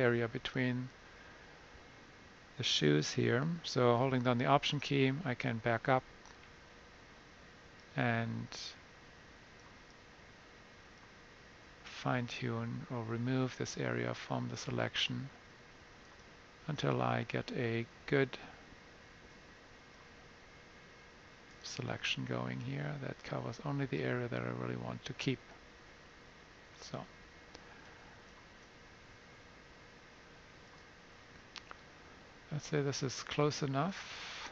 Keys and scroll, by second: 17.9 [, 18.5 [.